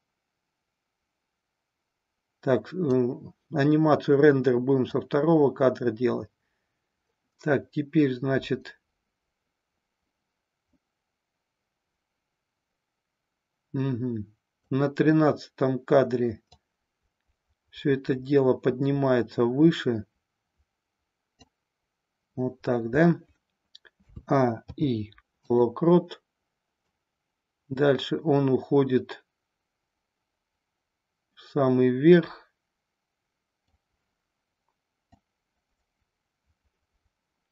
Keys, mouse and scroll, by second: 4.9-14.6 drag, 16.5-21.4 drag, 24.0 a, 24.5 i, 26.8-33.8 drag, 35.0-37.5 drag.